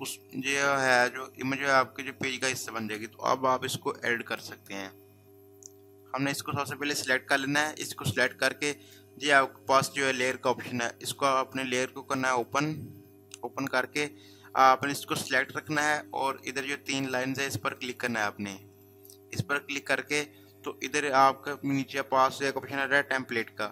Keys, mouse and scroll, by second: 0.1 click, 7.3 click, 12.1 click, 18.7 click.